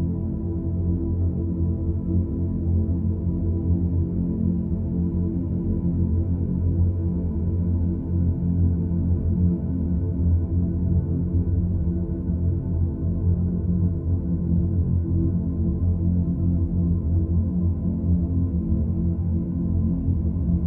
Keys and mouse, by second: 1.0 click, 2.1-6.6 drag, 9.6 F2, 11.0 2, 14.2 ctrl+b.